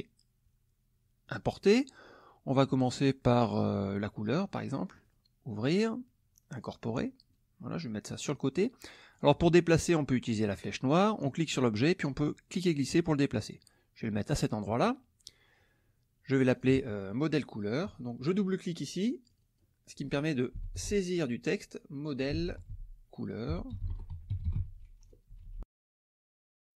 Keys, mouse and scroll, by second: 1.3 click, 3.7 click, 5.0 click, 6.6 click, 7.3-9.3 drag, 11.3-13.7 drag, 16.5 click, 19.3 click, 20.3-25.1 typing, 25.3 Delete, 25.9 Return.